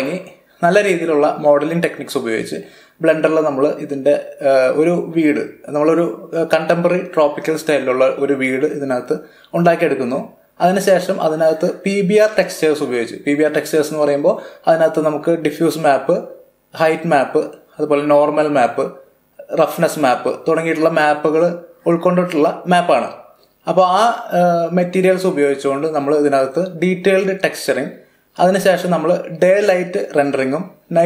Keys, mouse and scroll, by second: 0.5 click, 1.1-2.2 middle drag, 2.2-2.6 scroll up 1, 4.4 click, 5.4 shift+middle click, 6.3-7.6 middle drag, 7.6 scroll up 2, 9.1-9.7 scroll down 2, 9.7-10.4 middle drag, 28.5-30.4 typing, 28.9 click, 30.3 click.